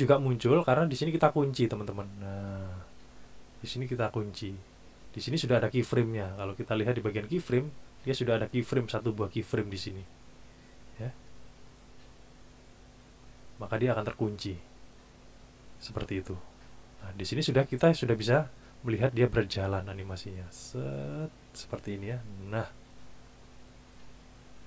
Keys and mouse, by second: 6.9 click, 13.1 click, 17.9 click, 19.5 click, 20.2 click.